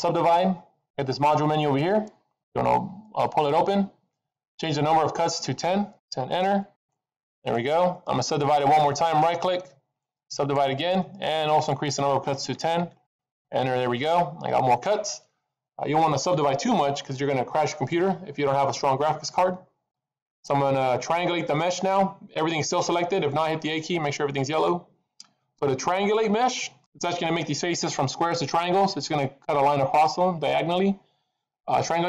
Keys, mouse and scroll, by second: 1.8 click, 2.9 click, 5.2 click, 9.4 right click, 11.5 click, 17.0 middle click, 18.8 click, 23.6 a.